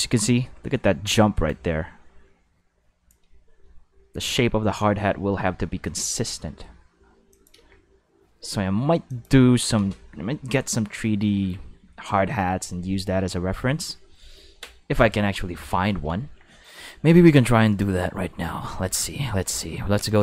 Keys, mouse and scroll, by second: 7.3 click, 7.5 space, 8.4 space, 9.1 click, 15.0 click, 15.9 ctrl+s, 17.7 click, 20.0 click.